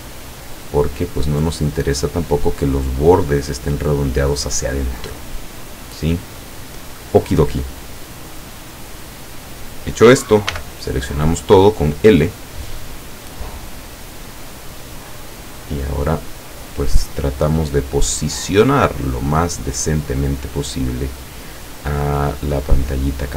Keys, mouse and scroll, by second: 2.3 click, 4.9 scroll up 1, 5.0-5.8 middle drag, 5.9 scroll down 2, 10.5 l, 12.7-15.6 drag, 16.5-18.6 drag, 18.9 middle click, 20.7-22.0 drag, 22.5-23.3 drag.